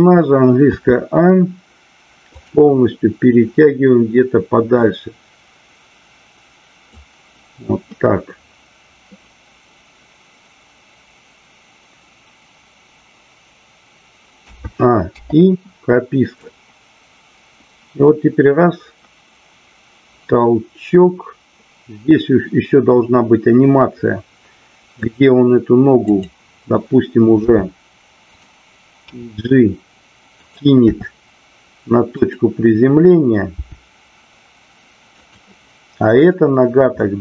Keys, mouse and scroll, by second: 2.3 click, 4.6-6.9 drag, 16.4-25.1 drag, 26.1 click, 27.4 r, 29.2 g, 30.4 click, 32.2 click, 36.2-37.2 drag.